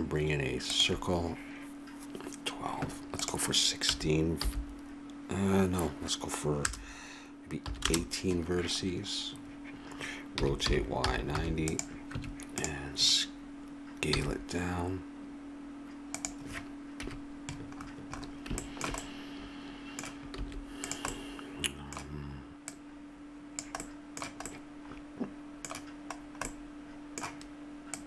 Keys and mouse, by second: 3.2-7.8 drag, 7.8 middle click, 10.3 r, 12.1 Tab, 14.1 s, 17.0 KP_Decimal, 20.3 s, 20.8 click, 21.2 middle click, 21.6 middle click, 22.6-24.5 drag, 24.5-26.1 middle drag, 26.1 click, 26.5-27.9 middle drag.